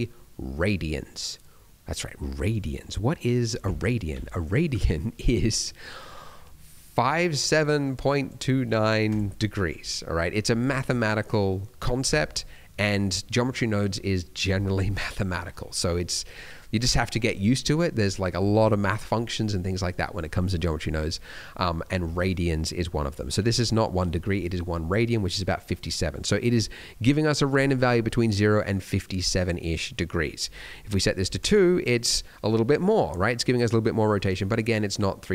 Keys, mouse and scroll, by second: 14.8 middle click, 15.5-16.1 scroll down 2, 16.1 middle click, 20.6 middle click, 21.2 middle click, 25.5 middle click, 26.1 middle click, 26.3-29.1 scroll up 1, 29.1-29.4 scroll up 1, 30.5 click, 31.9 middle click, 32.5 middle click.